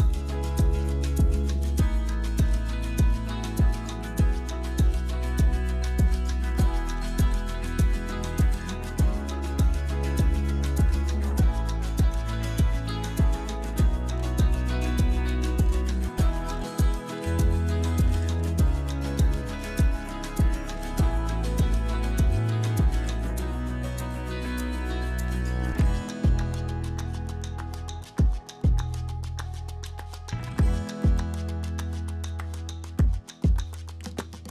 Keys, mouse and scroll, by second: 0.3 click, 1.2 middle click, 1.6 Tab, 1.8 middle drag, 2.2 ctrl+r, 3.5 ctrl+b, 4.6 Tab, 5.0-5.8 drag, 6.3 drag, 6.5 middle click, 6.6 click, 7.0 shift+drag, 7.7 shift+drag, 8.0 middle drag, 9.0 shift+right click, 9.4 shift+a, 12.2 ctrl+3, 12.7-13.2 right drag, 14.1 Tab, 14.4 s, 16.2 Tab, 16.8 middle drag, 18.2 click, 19.6 click, 20.2-20.9 drag, 21.5 click, 23.3 click, 23.7 middle click, 24.1 click, 24.5 Tab, 24.8 z, 25.3 2, 26.9 ctrl+shift+s, 28.0 x, 29.5 z, 30.0 Tab, 30.5 shift+a, 32.0 ctrl+3, 32.3 click, 32.9 Tab, 33.1 s.